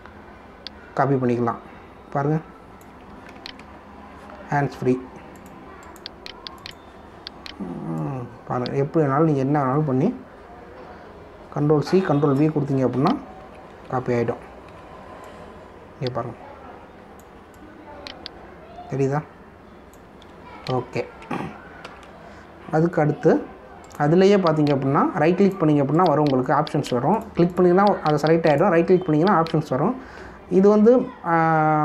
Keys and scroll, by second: 0.3 v, 4.6 ctrl+alt+z, 14.4 ctrl+c, 14.7 ctrl+v, 15.7 v, 21.7 ctrl+alt+z.